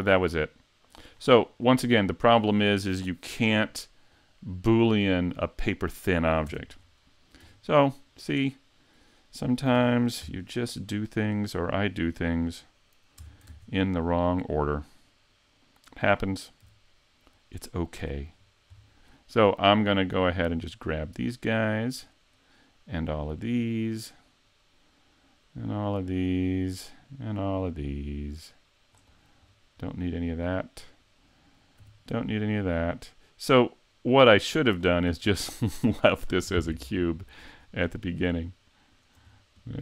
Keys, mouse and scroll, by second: 1.1-1.7 scroll down 5, 1.7 middle click, 4.2 middle click, 6.5 Tab, 6.8-7.4 scroll down 1, 7.4 scroll down 2, 7.6 Tab, 8.0 middle click, 9.8 ctrl+Tab, 10.2 3, 11.8 right click, 13.2 Tab, 18.0 c, 29.5-31.8 scroll down 2, 29.9 middle click, 31.8 c, 35.1 right click, 35.3 middle click, 37.6-38.2 scroll up 4, 38.4 shift+right click, 39.0 shift+right click, 39.3-39.7 scroll down 2, 39.7 middle click.